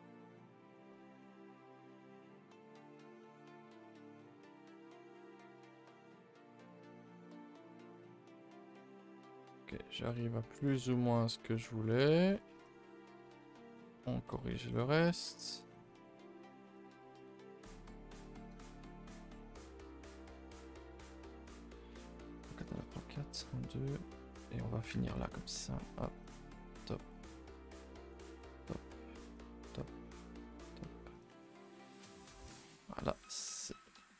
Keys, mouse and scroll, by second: 6.4 middle click, 10.1 middle click, 10.3-10.7 scroll up 1, 10.7 s, 11.8 middle click, 12.2 click, 12.6 shift+click, 12.9 s, 13.9 shift+middle click, 14.7 click, 15.0 click, 15.2 g, 16.1 click, 16.3 g, 17.5 click, 17.7 g, 18.4 middle click, 18.8 click, 19.3 click, 19.5 g, 20.4 click, 20.6 g, 21.3 shift+middle click, 21.7 a, 21.9 a, 22.1 shift+middle click, 24.1 middle click, 25.1 ctrl+r, 25.8 click, 26.1 g, 27.2 click, 27.3 g, 28.5 click, 28.7 g, 29.6 click, 29.8 g, 31.1 click, 31.3 Tab, 31.6 a, 31.7 a, 31.9 scroll down 2, 32.2 middle click, 32.4 scroll, 32.5-33.5 scroll up 4, 33.5 click, 33.8 middle click.